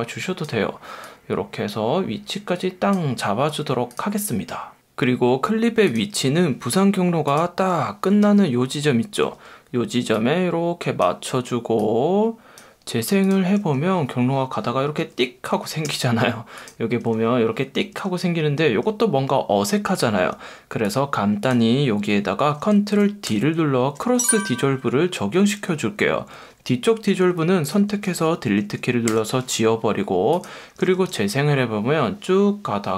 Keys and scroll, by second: 8.2 F1, 13.6 space, 15.0 F1, 23.3 super+o, 31.0 space.